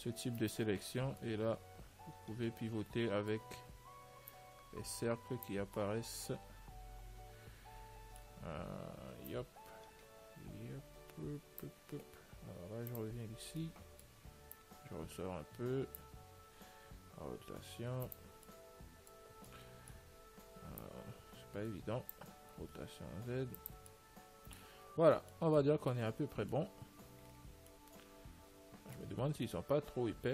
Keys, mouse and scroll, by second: 0.9-2.6 right drag, 4.6 click, 6.0-8.0 middle drag, 9.6 click, 13.2-16.6 drag, 13.9-15.6 middle drag, 17.2 r, 18.8-21.6 middle drag, 21.1 click, 22.7 r, 24.2 middle click, 28.3-30.3 middle drag.